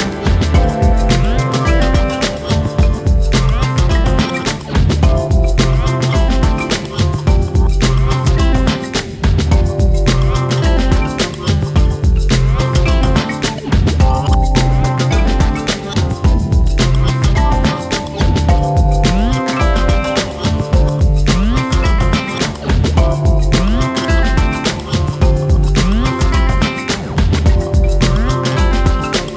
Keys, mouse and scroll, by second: 0.9 click, 1.5 Tab, 2.2 shift+s, 3.4-4.4 drag, 5.6 Tab, 6.0 click, 6.4 r, 12.1 click, 12.7-13.7 drag, 14.2 a, 14.3 scroll down 3, 14.6 shift+middle click, 14.9 r, 16.2 scroll down 2, 16.4 middle click, 17.1 KP_7, 17.3-17.7 scroll up 2, 17.7 shift+middle click, 18.5 shift+d, 20.4 ., 21.2 r, 22.0 click, 22.3 r, 22.8 s, 24.6 click, 25.3 a, 25.9 shift+d, 26.6 r, 27.6-27.9 scroll up 2, 27.9 s, 28.5 click, 29.2 l.